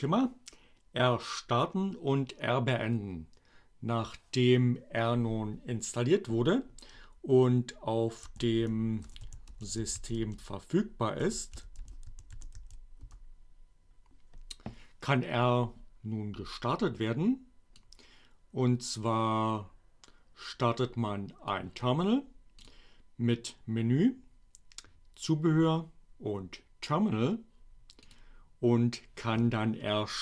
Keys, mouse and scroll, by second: 6.4-7.3 typing, 8.8-12.5 typing, 12.7 Return, 17.8-21.4 drag, 22.3 click, 27.8 click.